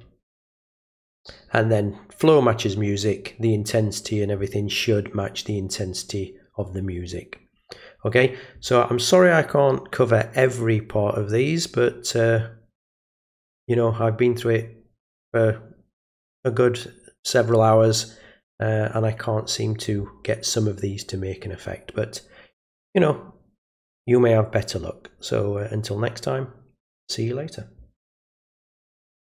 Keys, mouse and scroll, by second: 29.2 click.